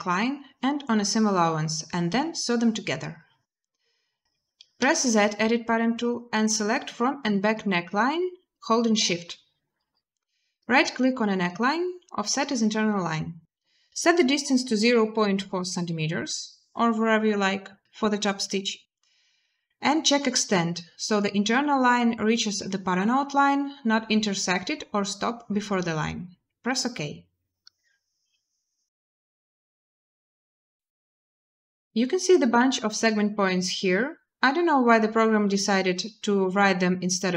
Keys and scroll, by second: 4.6 z, 14.6-14.9 typing.